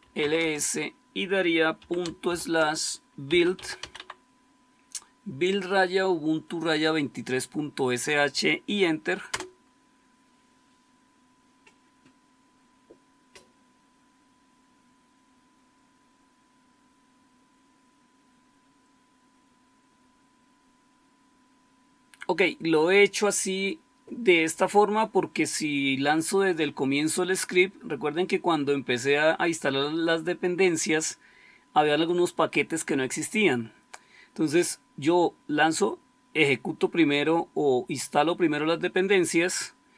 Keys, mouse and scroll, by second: 0.0-0.4 typing, 1.4-4.2 typing, 9.1 Return.